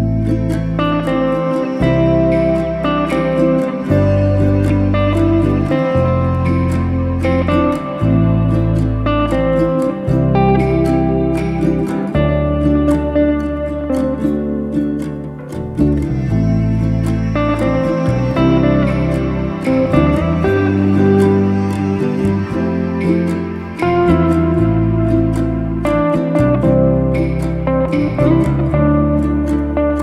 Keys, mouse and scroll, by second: 0.8 click, 2.1 click, 3.1-3.6 scroll up 1, 3.6 click, 4.8 click, 5.8 click, 6.2-7.0 drag, 22.0 click, 23.9-25.4 drag, 26.3 click, 26.9 click, 27.6-28.2 drag.